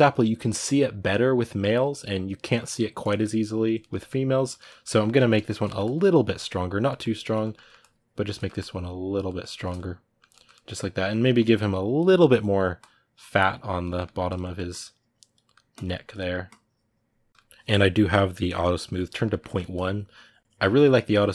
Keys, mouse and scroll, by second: 5.1 click, 5.4 ctrl+middle click, 5.6-7.2 drag, 7.2 ctrl+middle click, 7.6 click, 8.1 ctrl+middle click, 8.3 click, 9.0-10.8 shift+middle drag, 10.8-13.7 drag, 13.7 middle click, 14.0 click, 14.2 middle click, 14.5 click, 15.2 middle click, 15.5 click, 15.9 middle click, 16.2-17.3 drag, 17.3-19.5 ctrl+middle drag, 19.5-20.6 drag, 20.6 middle click, 20.9 click.